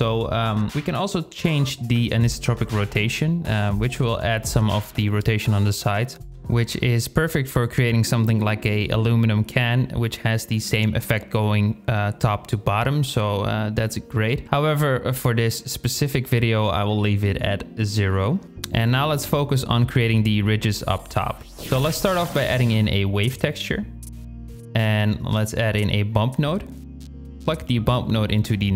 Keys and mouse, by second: 0.6-4.8 drag, 19.5 shift+click, 20.8 shift+a, 24.0 click, 24.6 shift+a, 27.5-28.7 drag.